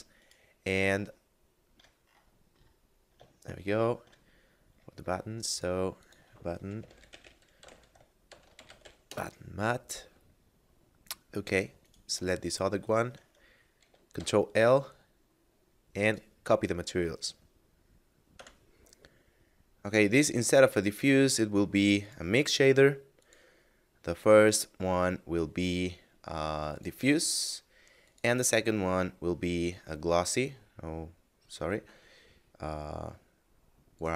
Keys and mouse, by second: 0.1 right click, 1.1 shift+middle click, 3.3 shift+middle click, 4.5 middle click, 5.5 click, 6.7-8.7 typing, 9.0 Return, 11.5 right click, 12.8 shift+right click, 16.0 click, 18.5 F9, 20.6 click, 26.6 click, 33.9 click.